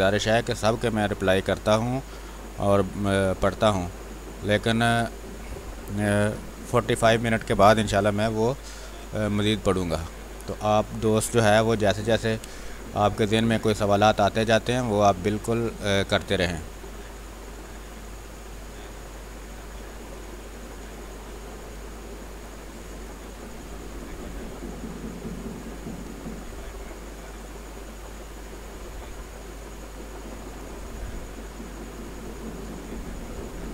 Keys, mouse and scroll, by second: 3.5 space, 4.3-5.6 drag, 5.6 space, 5.8 click, 6.1 space, 6.7 click, 7.8 b, 8.2 space, 8.3 click, 8.7 space, 9.6 click, 10.6-13.1 typing, 10.8 click, 11.5 click, 12.7 ctrl+click, 13.3 click, 14.3 x, 17.0 space, 17.5-32.6 drag, 24.5 click, 32.6 ctrl+z, 33.1-33.7 drag.